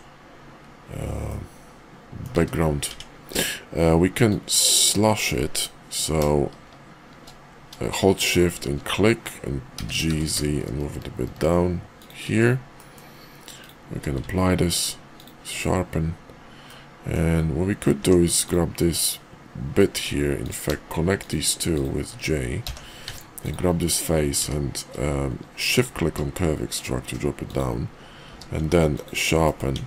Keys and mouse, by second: 1.2-2.2 middle drag, 2.3 `, 2.9 Tab, 4.3-8.4 drag, 9.7 g, 12.7 middle click, 13.5 click, 13.9 q, 16.6-17.1 middle drag, 18.0 Tab, 18.4 click, 19.9 Tab, 22.6 j, 23.0 Tab, 24.4 q, 28.2 q, 29.4 middle click, 29.7 Tab.